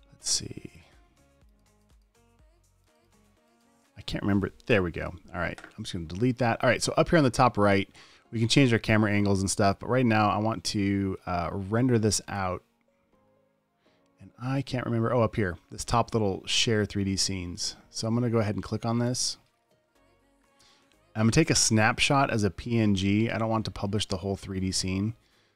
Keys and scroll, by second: 5.1 BackSpace.